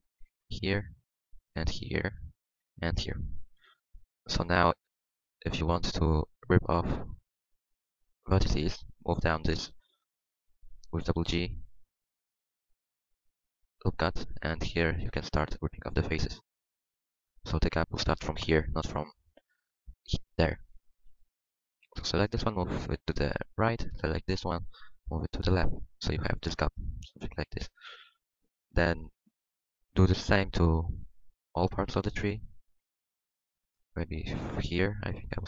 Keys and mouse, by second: 1.7 ctrl+r, 3.4 ctrl+r, 9.8-13.8 drag, 9.8-11.0 right drag, 11.0 g, 13.2 middle click, 13.2 right click, 15.0-18.2 drag, 16.1 v, 17.5 right click, 19.4 middle click, 19.9 middle click, 20.1 middle click, 20.7 click, 21.0 KP_1, 23.2-24.7 middle drag, 24.7 g, 25.3 middle click, 28.0 KP_1, 29.0-35.4 middle drag.